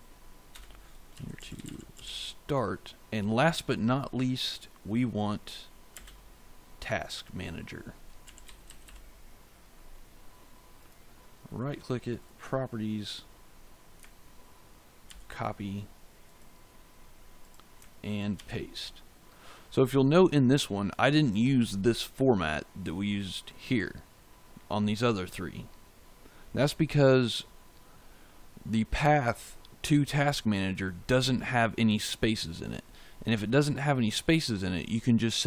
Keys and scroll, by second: 0.4 Return, 0.8-2.4 typing, 5.8 space, 7.9-9.2 typing, 15.0 ctrl+c, 18.3 ctrl+v.